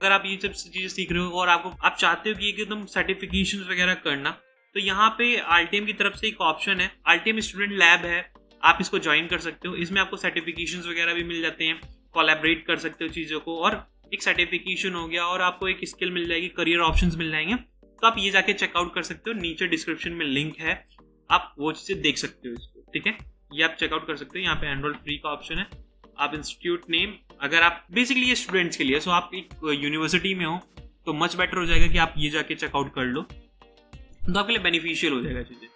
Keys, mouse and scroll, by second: 9.6-11.5 scroll down 1, 13.5 scroll up 1, 13.6 scroll down 1, 13.9 scroll up 1, 14.0-14.6 scroll down 1, 22.8 scroll up 1, 23.1 scroll down 1, 23.1-24.8 scroll up 1, 24.8-25.6 scroll up 1.